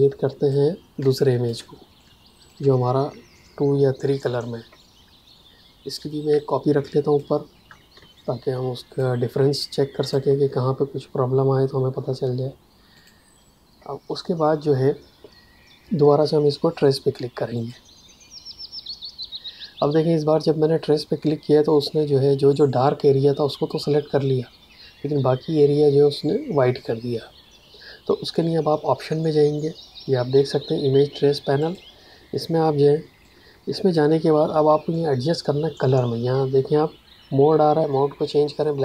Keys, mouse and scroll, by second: 0.9 space, 1.1 click, 1.4 space, 1.9 click, 5.9 click, 7.9 space, 8.1 click, 8.4 space, 9.5 click, 9.7 space, 12.9 click, 17.5 click, 31.5 click.